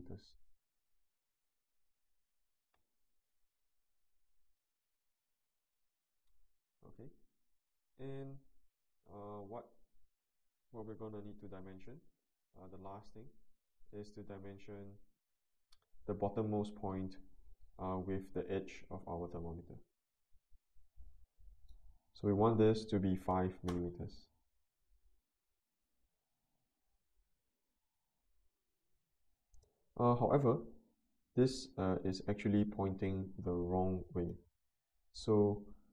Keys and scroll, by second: 23.3 5, 23.7 Return.